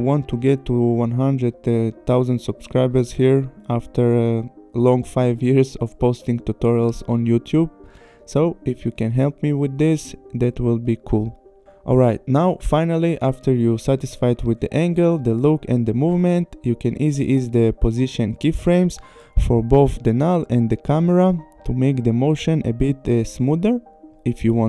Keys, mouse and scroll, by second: 14.1 space, 15.8 click, 16.0 click, 16.6 p, 17.7 click, 19.3 F9, 20.0 click, 20.7 u, 21.3 click, 22.9 click.